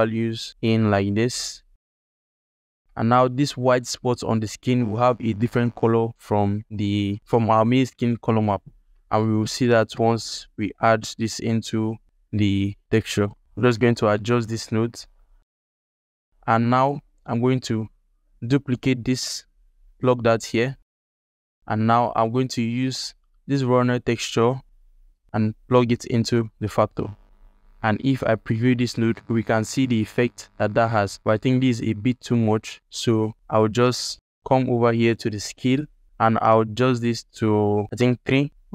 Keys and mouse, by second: 2.8-3.1 ctrl+alt+middle drag, 7.2 ctrl+alt+middle click, 11.0 ctrl+alt+middle click, 11.2 alt+shift+middle click, 11.5 click, 12.0 g, 13.1 alt+shift+middle click, 13.4 ctrl+alt+middle click, 13.7 alt+shift+click, 14.0 ctrl+alt+click, 14.2 click, 14.5 g, 15.6 ctrl+alt+click, 16.0 click, 16.2 ctrl+alt+click, 16.4 alt+shift+click, 18.2 shift+d, 20.3 alt+shift+click, 20.4 middle click, 20.7 ctrl+alt+middle click, 20.9 alt+shift+middle click, 21.1 ctrl+alt+middle click, 21.3 alt+shift+middle click, 21.5 click, 22.8 alt+middle click, 23.9 alt+click, 24.8-26.1 drag, 26.6 alt+shift+click, 27.2 ctrl+shift+click, 31.7 alt+shift+click, 33.3 alt+shift+click, 34.2 alt+click, 34.7 ctrl+alt+click, 35.6-38.2 drag.